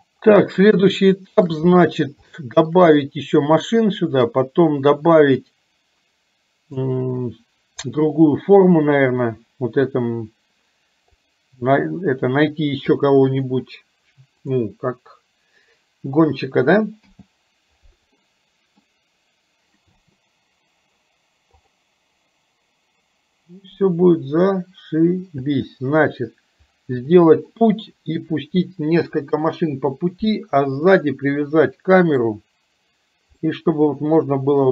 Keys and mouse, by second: 1.0 shift+middle click, 2.3 shift+middle click, 4.0 middle click, 8.0 click, 11.1 click, 17.1 h, 18.2 middle click, 20.1 space, 21.8 click, 25.6 space, 27.1 middle click, 31.0-32.2 middle drag, 33.5-34.6 middle drag.